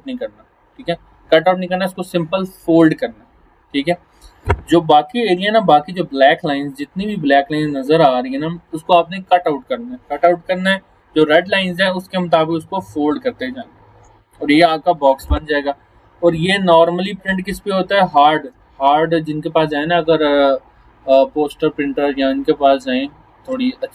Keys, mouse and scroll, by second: 5.1-6.4 scroll up 1, 8.1-9.1 scroll down 1, 15.8 scroll up 1, 17.2 alt+scroll up 1, 17.7 alt+scroll down 1, 18.1 space, 18.3 click, 18.7 alt+scroll down 1.